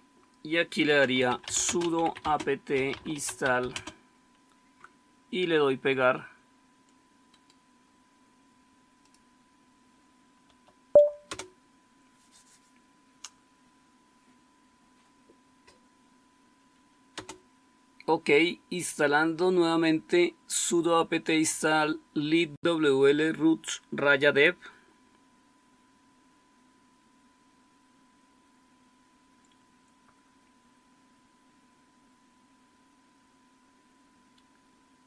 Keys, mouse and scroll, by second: 0.9-4.2 typing, 10.4 Tab, 10.6 Right, 11.2 Return, 17.1 Return.